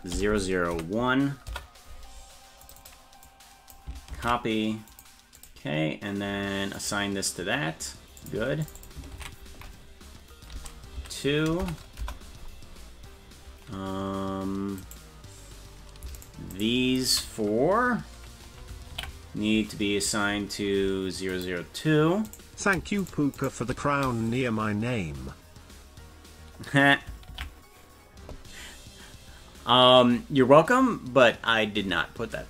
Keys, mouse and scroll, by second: 0.3 0, 2.6 click, 2.8-5.0 drag, 5.4 click, 6.7 click, 8.2 click, 8.6 click, 8.7-12.5 drag, 14.8 right click, 16.2 shift+right click, 16.6 shift+right click, 17.0 shift+right click, 18.9 ctrl+l, 21.3 click, 22.2 right click, 23.0 shift+right click, 23.4 shift+right click, 27.3 ctrl+l.